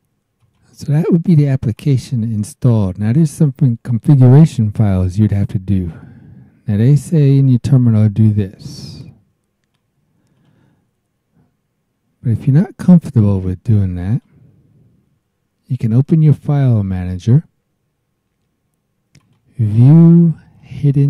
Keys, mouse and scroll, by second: 0.4 click, 1.7 click, 2.7 scroll down 1, 5.9-9.9 drag, 10.3 click, 14.1 click, 16.0-17.2 drag, 19.2 click, 20.5 click.